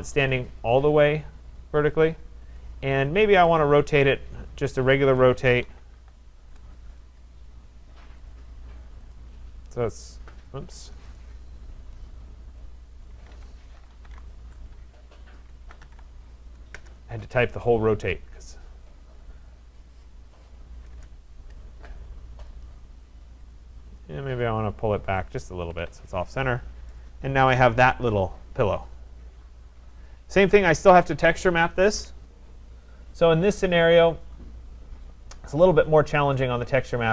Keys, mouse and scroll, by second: 1.0 click, 3.5 right click, 4.9 Escape, 5.6-6.5 typing, 8.3 click, 8.6 Escape, 9.2 click, 9.8 typing, 10.3 Escape, 10.6 Escape, 11.2 right click, 13.2 Escape, 13.4 Escape, 13.7-16.3 typing, 16.8 Return, 18.9 click, 20.3 click, 20.9 Return, 22.5 click, 23.6 click, 25.6 Escape, 25.8 Escape, 25.9-26.4 scroll, 26.9 right click, 27.2 scroll, 28.1 right click, 30.0-30.5 scroll, 31.1-31.8 scroll.